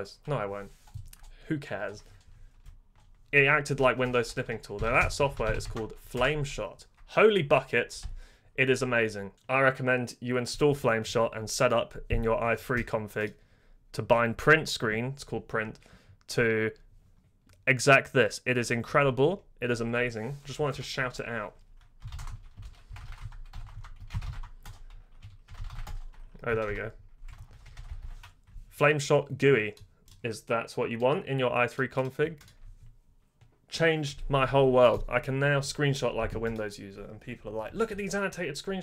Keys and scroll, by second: 4.0 Return, 4.5-6.0 typing, 6.1 Return, 8.0 super+i, 20.7 super+Return, 21.7-28.3 typing.